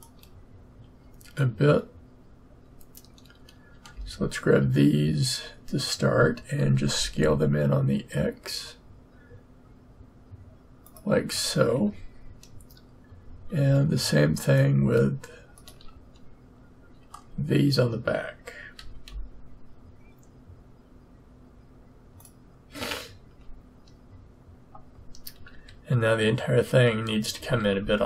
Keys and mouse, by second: 6.6 s, 11.7 a, 15.2-18.7 drag, 18.7 s, 23.2 a, 25.5 a, 27.4 s.